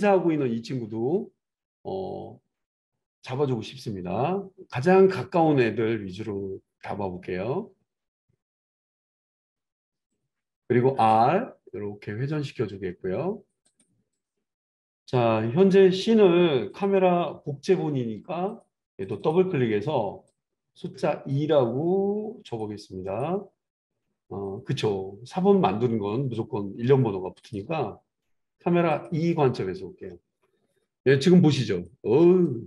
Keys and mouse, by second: 4.3-10.1 drag, 10.1-14.1 middle drag, 10.9 r, 14.1 click, 14.2-16.8 middle drag, 16.8-18.6 drag, 18.6 middle click, 19.0 click, 19.1 middle click, 19.2-22.6 drag, 22.6 middle drag, 27.0 middle click, 27.4-32.6 drag.